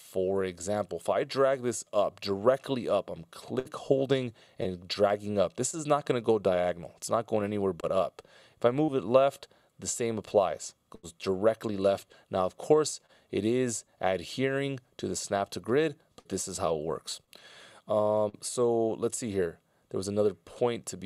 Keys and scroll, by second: 2.4 F16, 2.6 Delete.